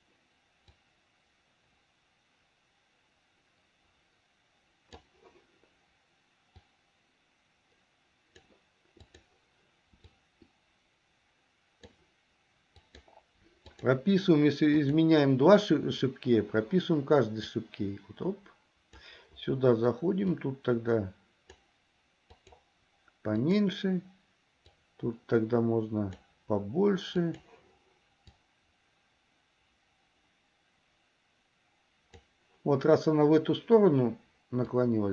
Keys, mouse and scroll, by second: 0.9-5.2 drag, 6.8-8.7 drag, 9.3 click, 10.3-12.0 drag, 13.1 click, 14.0 click, 17.7-19.3 drag, 20.4-21.7 drag, 22.6 click, 23.6 click, 24.8-26.4 drag, 27.4 click, 28.6-32.4 drag, 34.9-35.1 drag.